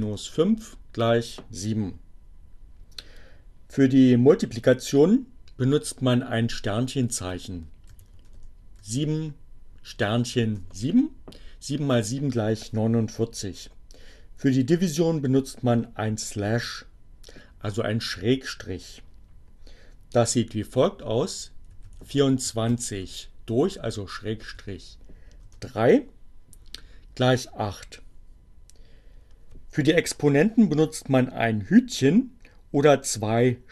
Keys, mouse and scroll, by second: 6.6 7, 8.5 7, 9.3 Return, 21.5-22.8 typing, 24.4 3, 25.1 Return.